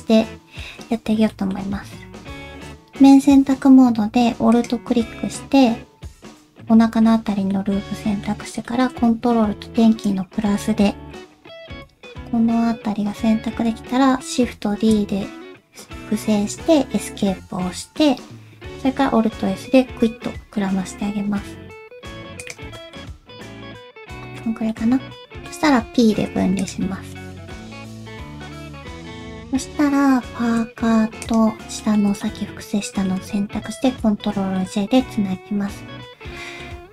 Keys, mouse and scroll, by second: 1.3 middle click, 2.5 ctrl+z, 2.5 click, 4.5 alt+click, 7.5 middle click, 8.6 middle click, 10.0 ctrl+KP_Add, 10.6 middle click, 14.7 shift+d, 17.7 middle click, 18.2-18.7 scroll up 1, 18.9 alt+s, 22.8 middle click, 23.1 KP_1, 24.4 scroll down 1, 24.7 middle click, 26.3 p, 27.1 Tab, 27.5 click, 27.9 middle click, 28.9 shift+middle click, 29.0 click, 30.0-30.3 scroll up 1, 31.2 shift+click, 31.8 shift+middle click, 32.2 middle click, 34.0 ctrl+j, 34.5 middle click.